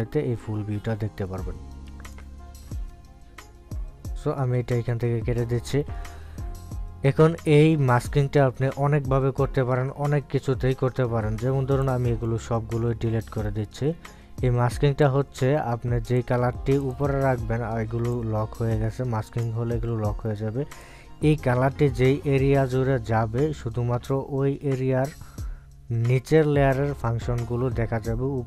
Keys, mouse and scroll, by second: 5.1 click, 12.9 click, 16.1 click, 16.1-17.9 drag.